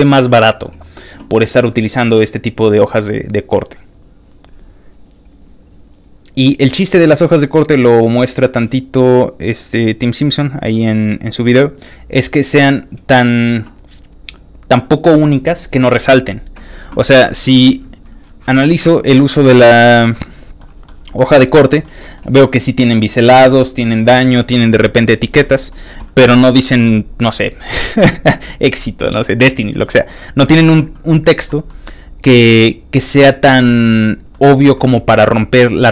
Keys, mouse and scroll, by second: 3.2 scroll down 1, 3.3 middle click, 3.8 middle click, 3.8-4.2 scroll up 1, 5.3 click, 6.3 click, 9.5 click, 10.5 click, 10.9 click, 17.5 click, 18.0 click, 19.3 ctrl+middle click, 19.9 ctrl+middle click, 20.8 ctrl+middle click, 21.1 ctrl+middle click, 22.0 ctrl+middle click, 24.3 ctrl+middle click, 25.4 ctrl+middle click, 30.0-30.4 scroll up 1, 31.7-34.3 ctrl+middle drag.